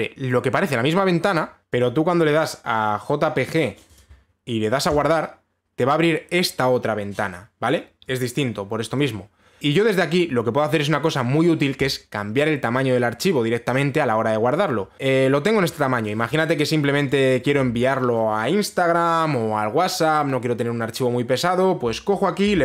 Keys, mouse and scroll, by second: 1.6 click, 1.7 click, 2.4 click, 4.6 click, 5.6 click, 9.6 click, 10.0 click, 12.5 click, 16.7 click, 18.1 click.